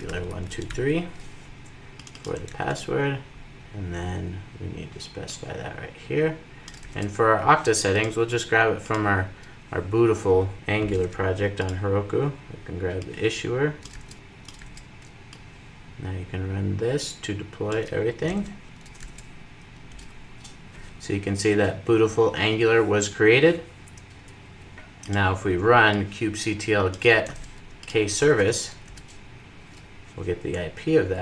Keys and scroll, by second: 2.2 super+c, 6.5 super+v, 13.6 super+v, 14.3 super+v, 18.1 super+c.